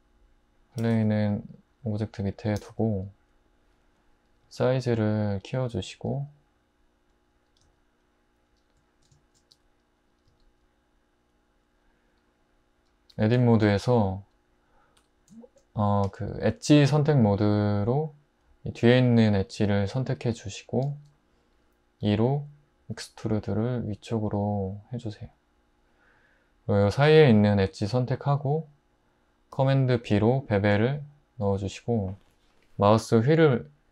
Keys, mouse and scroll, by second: 0.8 g, 2.6 typing, 4.4 s, 5.9 s, 7.6 s, 9.5 `, 10.3 s, 13.1 Tab, 15.0 2, 22.0 e, 23.0 z, 27.5 2, 30.0 super+b.